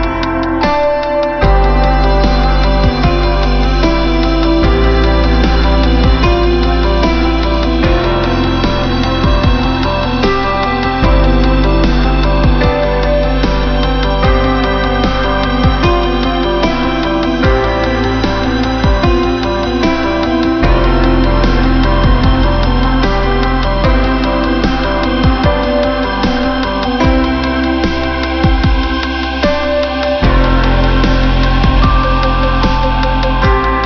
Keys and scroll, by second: 27.0 ctrl+=.